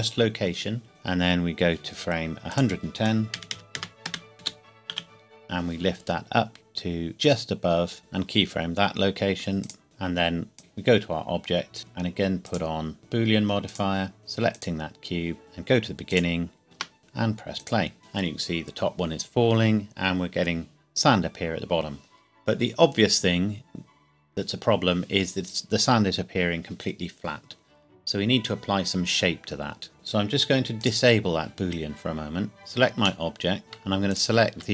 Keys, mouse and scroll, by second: 2.5 click, 3.4 KP_1, 3.7 KP_0, 4.1 KP_Enter, 4.4 g, 4.9 z, 8.0 i, 9.6 click, 10.6 click, 16.1 click, 16.6 ctrl+s, 17.6 click, 29.9 click, 30.8 click, 32.6 Tab, 33.2 middle click, 33.8 scroll up 1, 34.1 alt+click.